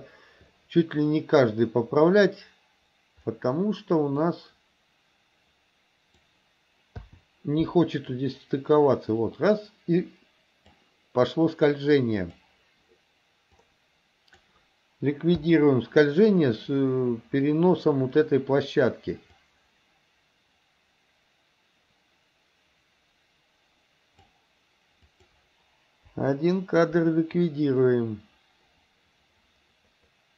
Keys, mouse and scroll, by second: 4.2 click, 4.7-6.3 drag, 7.1 i, 8.2-10.9 drag, 12.3 click, 13.7 click, 15.5 i, 19.4-24.4 drag, 25.1 click, 26.1 Delete, 27.4-30.3 drag.